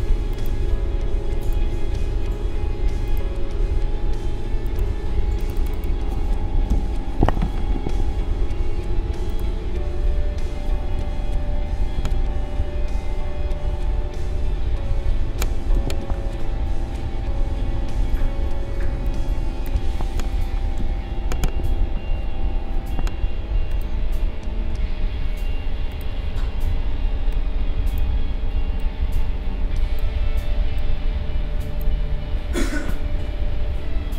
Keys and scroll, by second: 6.7 ctrl+c, 11.4 ctrl+v, 15.7 ctrl+z, 18.8 space, 20.7 ctrl+v.